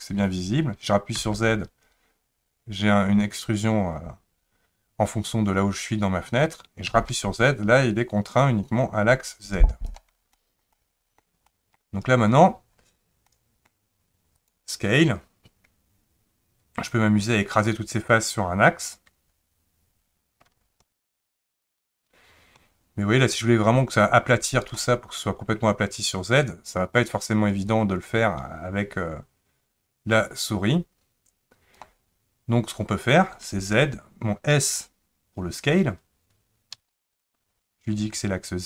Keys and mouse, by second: 10.4 shift+middle click, 10.7 middle click, 11.5 shift+middle click, 13.3 middle click, 14.3 click, 17.0-24.7 drag, 27.8-31.8 drag, 36.7 s.